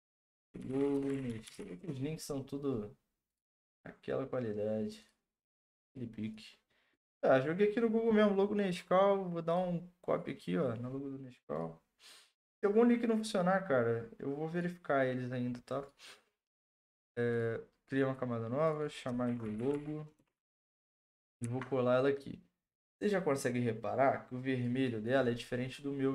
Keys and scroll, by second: 0.2-2.1 typing, 19.0-20.2 typing, 20.4 Return, 20.4 ctrl+v, 21.4 ctrl+t.